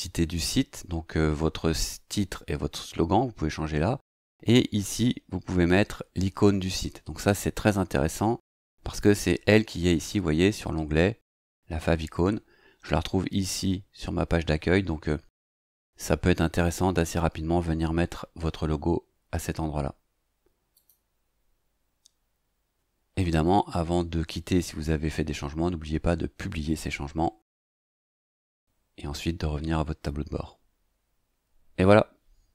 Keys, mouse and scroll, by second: 20.7 click, 27.9 click.